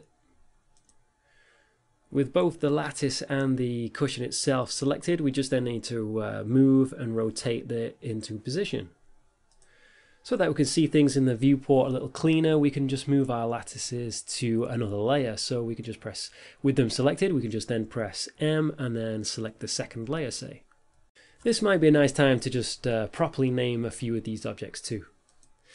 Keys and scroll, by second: 0.8 g, 1.9 z, 3.7 g, 6.8 g, 7.0 x, 9.0 a, 17.3 m.